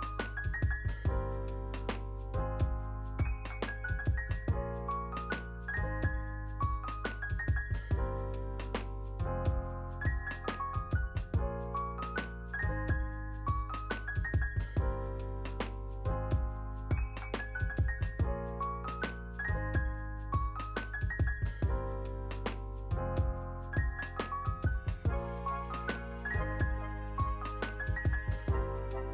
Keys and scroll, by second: 7.7 Right, 10.1 ctrl+c, 11.1 ctrl+v, 15.5 space, 20.4 space, 21.0 ctrl+s.